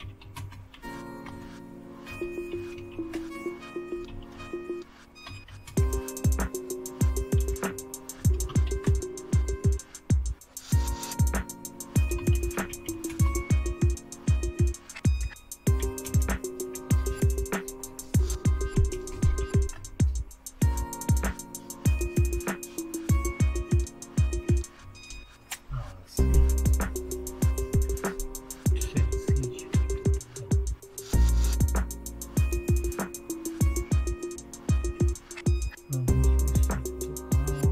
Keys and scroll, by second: 0.0-6.0 typing, 7.4-9.1 typing, 11.9-13.3 typing, 15.2-19.9 typing, 17.8 Return, 24.8 super+x, 27.8 Down, 28.7 Up, 29.0 Up, 29.7 Down, 29.9 Down, 34.8 Up, 35.0 Up.